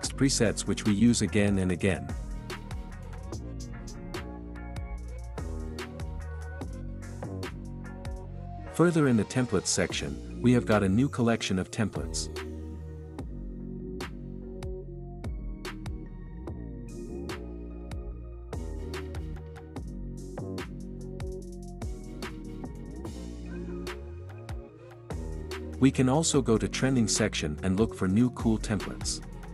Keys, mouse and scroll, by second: 4.5 space, 9.1-10.1 drag, 14.5-15.5 drag, 17.6-18.6 drag, 25.9-26.9 drag.